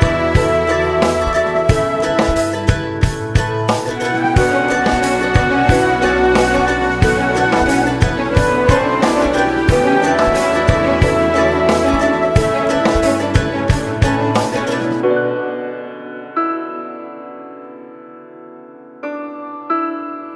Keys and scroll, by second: 7.2 ctrl+space, 7.7 ctrl+space, 7.8 ctrl+space, 7.8 ctrl+space, 7.9 ctrl+space, 7.9 ctrl+space, 8.0 ctrl+space, 8.0-14.1 ctrl+space.